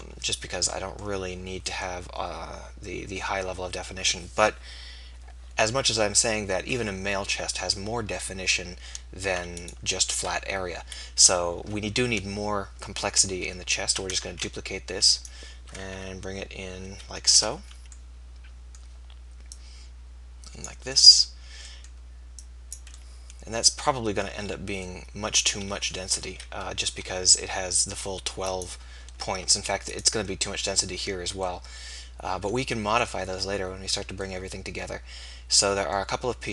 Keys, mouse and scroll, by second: 11.0 KP_1, 14.3 shift+d, 15.8 r, 18.1-19.3 drag, 26.3 KP_3, 27.1 r.